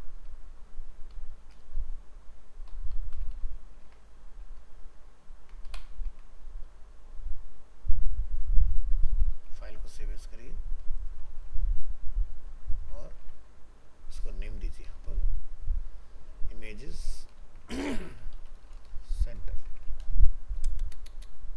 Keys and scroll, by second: 3.8 ctrl+s, 4.6 ctrl+z, 6.1 ctrl+s, 9.6 alt+a, 11.3 alt+移, 13.2 ctrl+Tab, 17.4 ctrl+shift+Left.